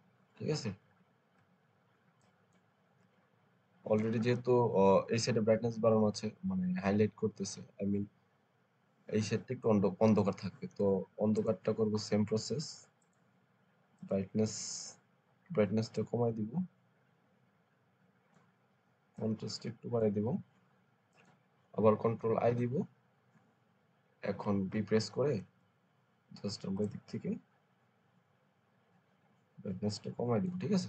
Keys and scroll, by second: 22.4 ctrl+i, 24.6 alt+b, 25.2 alt+b.